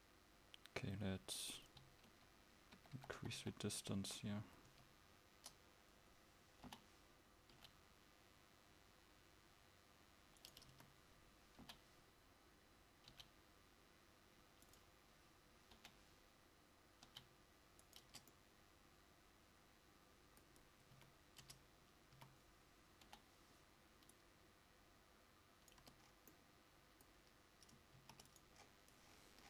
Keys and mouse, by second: 2.2 KP_1, 2.9 KP_4, 4.8 Tab, 4.8 KP_4, 4.8 KP_6, 6.7 l, 7.7 g, 10.8 a, 11.7 l, 14.8 g, 15.9 l, 18.2 Tab, 21.1 a, 21.5 Tab, 22.2 a, 23.2 l, 25.7 click, 26.1 Tab, 28.1 ctrl+s.